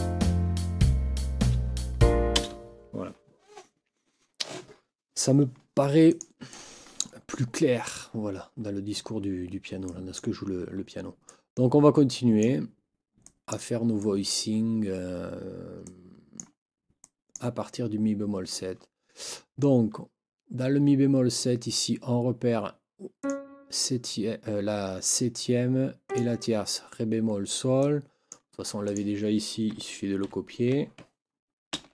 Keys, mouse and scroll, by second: 2.3 space, 6.1 click, 6.5-7.2 drag, 9.9-10.3 drag, 11.3-12.6 drag, 13.2-13.7 drag, 14.0-14.5 drag, 15.8-16.5 drag, 17.0 click, 23.2 click, 26.1 click, 27.8-28.5 drag, 28.9 click, 30.2 shift+Down, 31.7 ctrl+c.